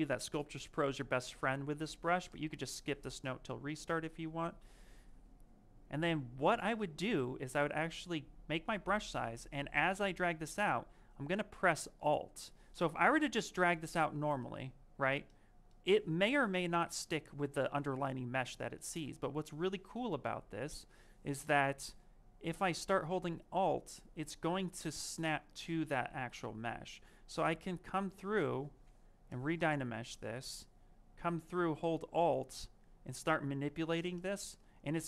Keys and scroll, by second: 5.8 s, 8.5 s, 12.7 ctrl+z.